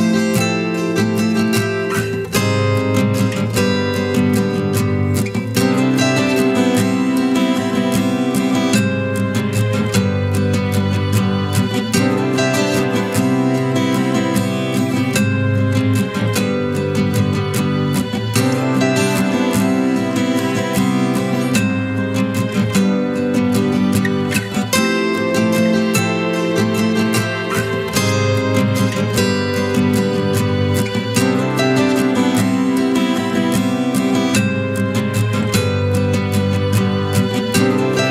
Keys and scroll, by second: 34.0 ctrl+t.